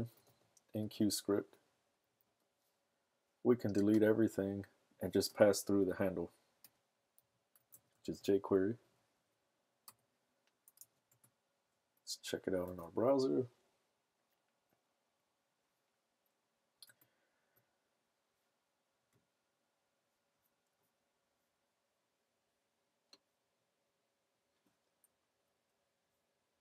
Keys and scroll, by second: 0.0-0.8 typing, 1.9 Down, 2.0 Down, 2.2 Return, 6.6-11.3 typing, 8.7 Right, 8.8 Right, 9.2 Right, 11.3 super+Tab, 12.8 super+r, 16.9 super+Tab.